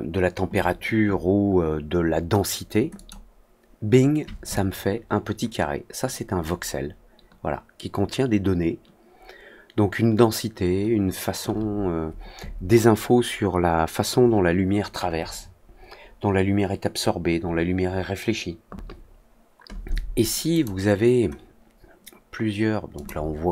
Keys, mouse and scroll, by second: 2.9 click, 4.4-11.3 alt+drag, 20.4 click, 22.9 click.